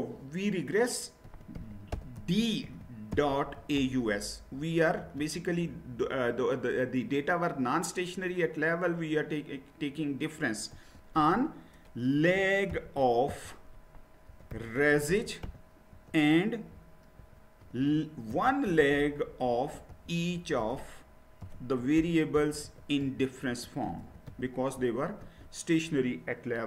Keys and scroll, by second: 1.0-5.0 typing, 10.7 space, 12.5-25.2 typing.